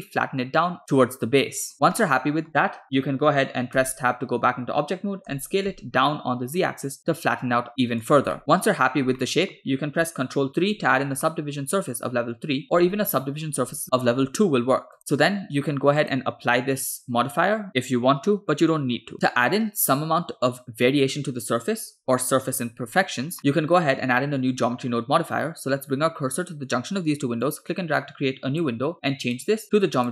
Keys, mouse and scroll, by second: 2.0-3.7 shift+middle drag, 3.8 Tab, 5.3 s, 8.3-8.7 middle drag, 8.8-9.3 scroll up 1, 9.3 middle click, 10.8 ctrl+3, 11.4-12.6 middle drag, 13.7 ctrl+2, 15.0 click, 16.0-19.1 drag, 19.1 middle click, 23.4 middle click, 27.5-28.7 drag, 29.4 click.